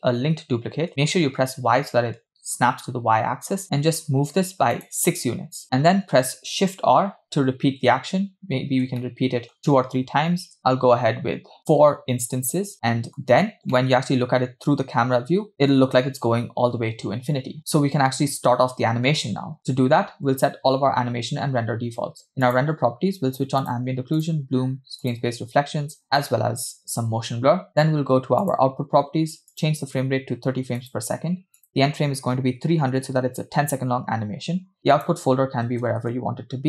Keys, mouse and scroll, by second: 5.6 middle click, 7.2 shift+r, 8.0 shift+r, 8.5-9.0 scroll down 2, 9.0-9.6 shift+middle drag, 10.6 shift+r, 12.7-13.2 middle drag, 13.6 scroll up 2, 13.8-15.8 middle drag, 17.6 middle click, 17.6 scroll down 1, 22.5-22.9 drag, 23.7-25.1 drag, 25.2-26.0 drag, 26.2-27.3 drag, 28.5-31.1 drag, 31.6-33.3 drag, 32.8 0, 35.0-36.2 drag, 35.8 /.